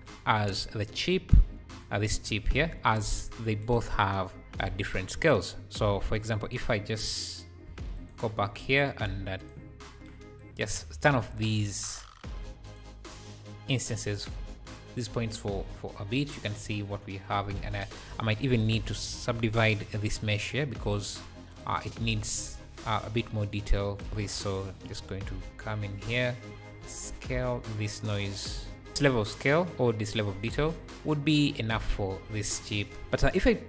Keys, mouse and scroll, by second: 1.7 ctrl+shift+click, 2.2-2.8 scroll down 4, 6.4 click, 8.0 ctrl+shift+click, 9.4 click, 10.4 click, 11.3-14.1 drag, 13.5 ,, 14.1 m, 15.0 scroll down 2, 15.2 `, 16.4 scroll up 1, 17.2-18.1 scroll up 1, 18.1 shift+a, 20.9 shift+a, 22.7-24.5 drag, 25.1 `, 26.7 shift+d, 27.7-29.1 shift+drag, 30.6 click, 30.8 `, 33.0 click, 33.1-33.6 scroll down 2.